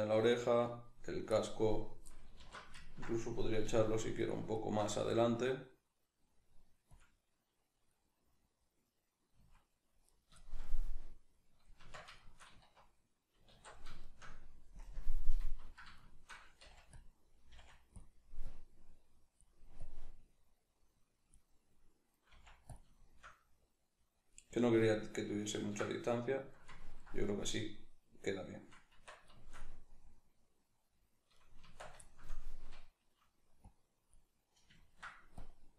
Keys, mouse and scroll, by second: 0.3 right click, 1.3 click, 2.4 alt+q, 2.8-3.7 ctrl+middle drag, 3.7 g, 4.3 click, 4.5 shift+middle click, 5.0 g, 7.0 click, 7.9-9.3 middle drag, 9.3 s, 10.2 right click, 10.4-11.8 shift+middle drag, 11.8 Tab, 13.5 alt+q, 14.0 shift+middle click, 14.8 KP_Decimal, 16.0 shift+middle click, 16.6 f, 17.0 click, 17.5 f, 18.0 click, 22.3 click, 22.3 f, 22.9 shift+middle click, 23.7-25.3 drag, 25.3-31.3 ctrl+middle drag, 28.9 Tab, 31.3 right click, 31.6 Tab, 32.0-33.7 shift+middle drag, 33.7 click, 34.3-35.4 middle drag, 35.4-35.7 drag.